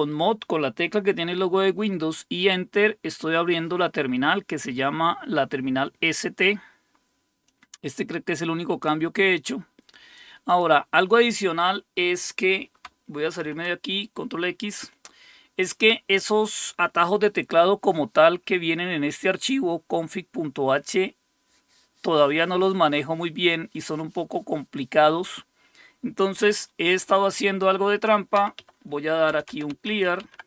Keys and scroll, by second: 13.4 ctrl+x, 28.4-30.4 typing.